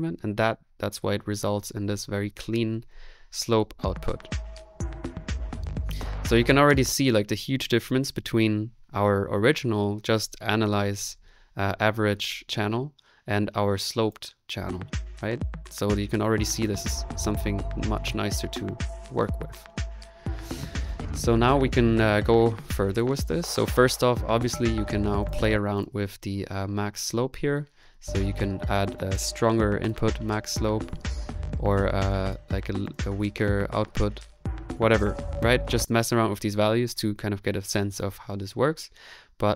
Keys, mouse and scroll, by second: 6.7 space, 19.3 middle click, 22.2-23.2 middle drag, 24.4 middle click, 25.2-29.9 drag, 25.3 space, 30.1 click, 32.1 click, 34.4 ctrl+z, 34.8 ctrl+z, 35.6 space.